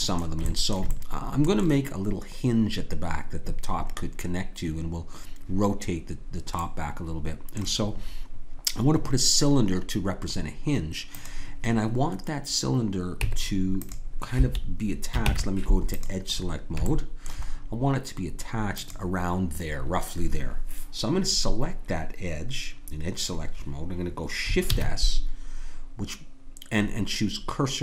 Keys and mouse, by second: 11.1-13.2 drag, 13.2 Tab, 15.2 ctrl+Tab, 17.2-18.4 drag, 18.7-21.2 drag, 24.7 shift+s.